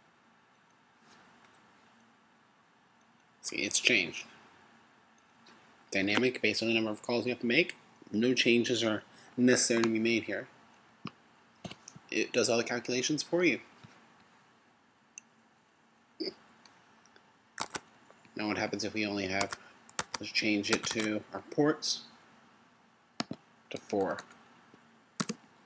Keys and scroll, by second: 17.8 super+Tab.